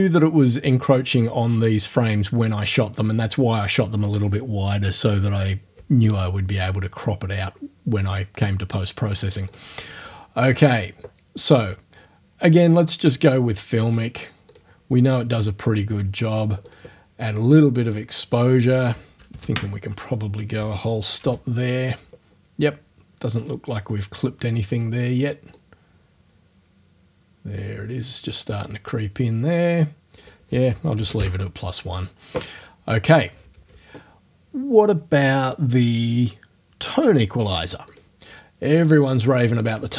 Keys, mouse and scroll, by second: 9.4 click, 13.3 click, 14.5 click, 16.7 click, 18.4 click, 19.3 KP_1, 19.4 KP_Enter, 21.2 o, 25.6-29.9 drag, 30.2 click, 31.0 KP_1, 31.2 KP_Enter, 37.9 click, 39.6 click.